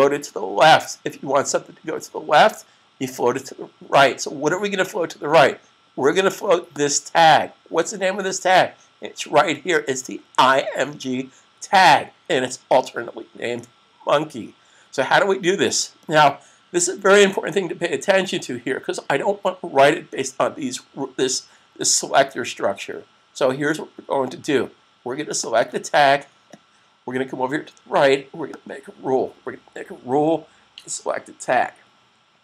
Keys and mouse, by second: 5.1 click, 6.9 click, 25.2 click, 28.3 click.